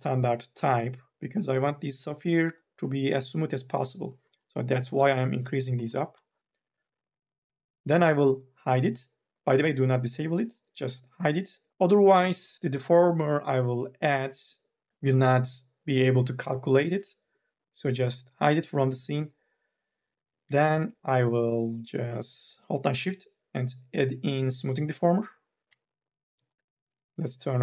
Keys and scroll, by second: 5.3 KP_1, 5.6 KP_5, 5.9 KP_0.